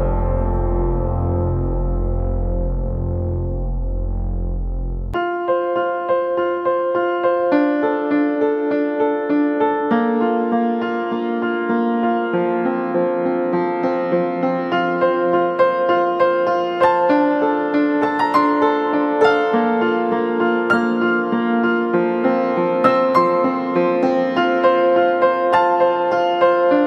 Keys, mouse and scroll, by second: 6.2 right click, 8.8 ], 9.2 ], 9.3 ], 9.8 double click, 22.5 right click, 24.8 typing.